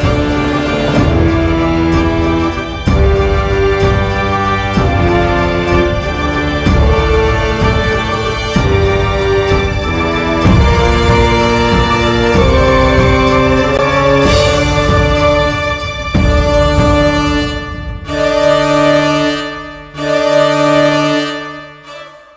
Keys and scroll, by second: 21.5 space.